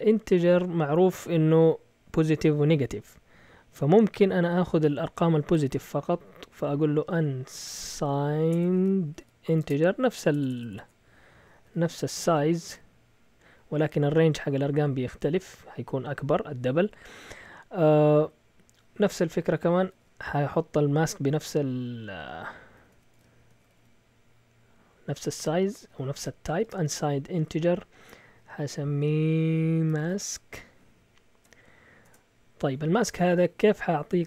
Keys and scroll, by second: 7.0-13.9 typing, 19.8 typing, 22.5-24.2 typing, 25.6-26.7 typing, 29.6-31.4 typing, 32.0 Return.